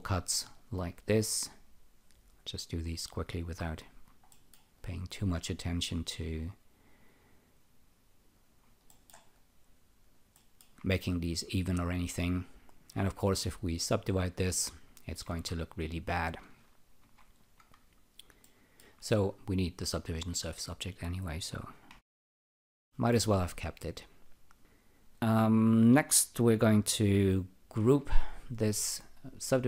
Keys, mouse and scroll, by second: 0.4 click, 3.8 click, 4.3 alt+middle click, 4.7 alt+click, 8.3 click, 8.9 alt+middle click, 9.3 alt+click, 10.3 alt+middle click, 11.6 alt+click, 12.5 alt+right click, 13.7 alt+click, 15.2 ctrl+r, 17.0 ctrl+z, 18.4 alt+middle click, 20.0 alt+click, 21.9 e, 22.8 alt+middle click, 23.7 alt+right click, 27.8 alt+g.